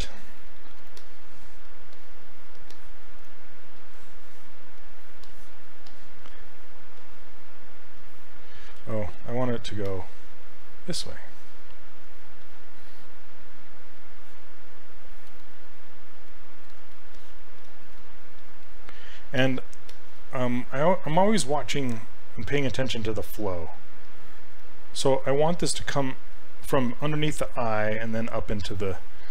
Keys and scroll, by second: 8.8 ctrl+z, 9.2 ctrl+z.